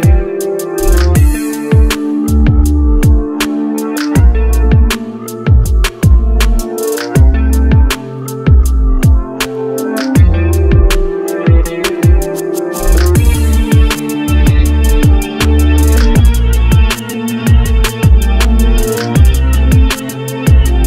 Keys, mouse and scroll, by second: 9.0 right click.